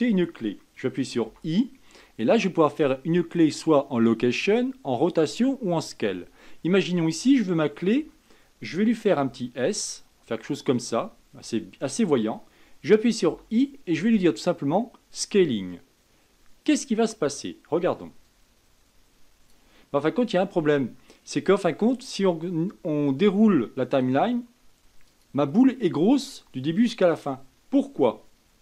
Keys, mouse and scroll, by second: 9.5 s, 18.5-21.6 drag, 24.2-28.6 drag.